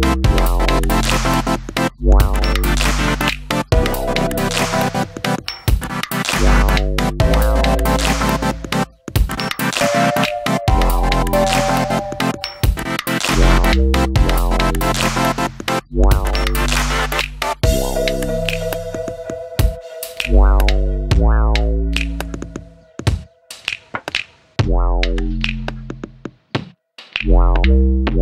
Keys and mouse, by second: 0.8 g, 1.7 click, 2.4 middle click, 3.4 KP_1, 4.5 Tab, 5.5 g, 6.2 shift+click, 6.7 shift+d, 8.0 click, 8.2 s, 9.0 click, 9.7-10.7 middle drag, 12.9 click, 15.4 click, 16.9-17.9 drag, 21.5 middle click, 22.5-28.2 drag.